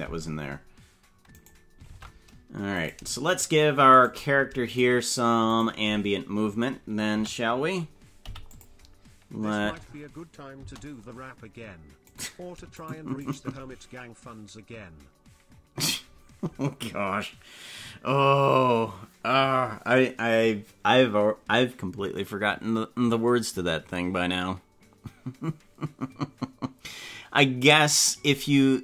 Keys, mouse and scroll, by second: 1.6 right click, 2.0 ctrl+Tab, 3.0 right click, 3.4 shift+right click, 4.0 right click, 5.0 right click, 5.8 right click, 7.2 a, 8.2 i, 9.5 space, 10.6 space, 11.8 space, 12.2 right click, 13.0 shift+right click, 13.4 right click.